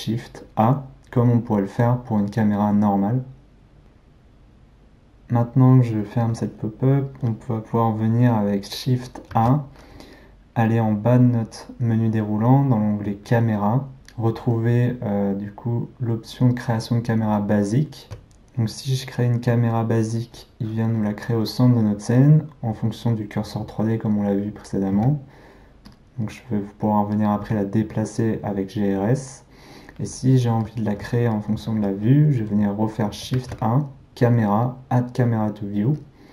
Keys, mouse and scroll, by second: 9.4 shift+a, 18.0 shift+a, 25.0 g, 26.3-27.4 middle drag, 27.4 g, 28.2-33.4 middle drag, 33.4 shift+a.